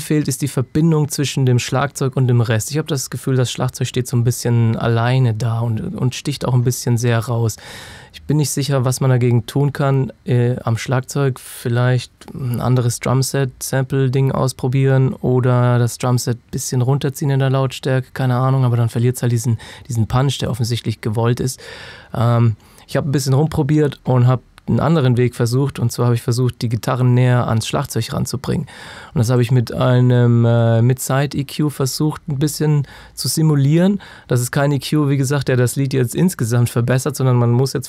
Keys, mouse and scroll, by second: 24.8 click.